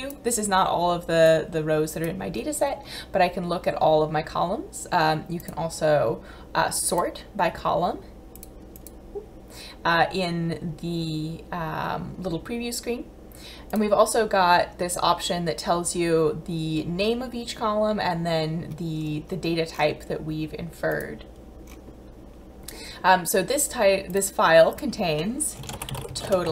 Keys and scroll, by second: 25.6-26.5 typing.